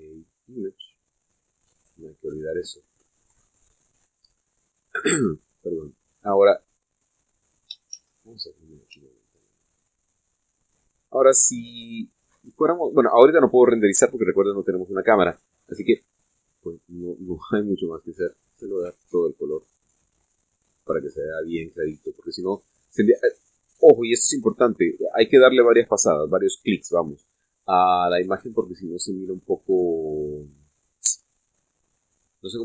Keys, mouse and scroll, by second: 1.2 click, 8.8 shift+z, 9.8 Tab, 16.2-16.7 scroll down 2, 16.8-17.3 scroll up 2, 17.5 scroll down 1, 18.4 click, 19.1 click, 19.8 click, 20.4 click, 20.9 click, 21.4 click, 23.5-25.0 middle drag, 29.1-30.0 middle drag, 30.1-30.9 scroll up 1, 30.9-31.9 scroll down 4, 32.1-32.6 middle drag.